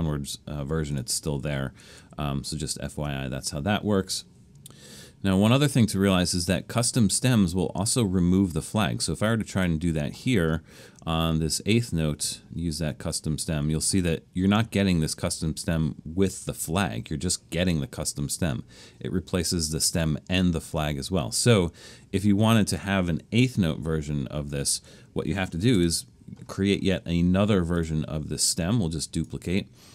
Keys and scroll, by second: 1.4 super+z, 2.0 super+z, 9.5 Return, 24.5 BackSpace, 25.8 Return.